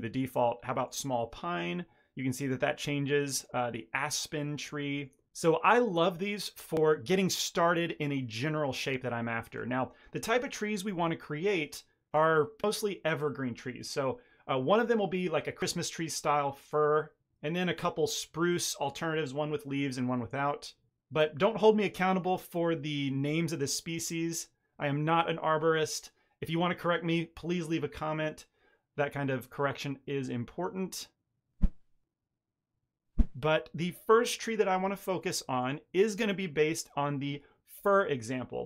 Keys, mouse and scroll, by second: 2.3 click, 4.1-4.4 scroll down 2, 4.8 scroll down 5, 4.8 shift+middle click, 10.2-10.6 scroll up 2, 11.1 shift+middle click, 23.7 middle click, 35.5 click.